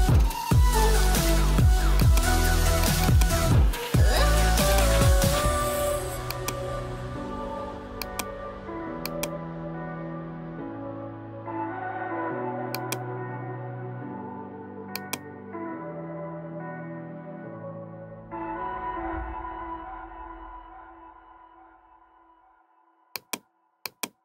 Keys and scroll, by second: 10.6 alt+BackSpace, 13.9 [, 22.4 [.